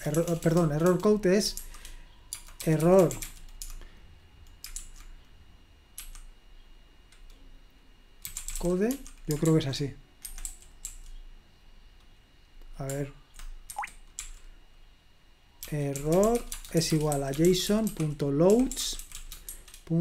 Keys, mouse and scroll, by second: 0.0-3.7 typing, 4.8 typing, 6.0 typing, 8.0-10.9 typing, 10.3 Escape, 14.0 Escape, 14.5-20.0 typing.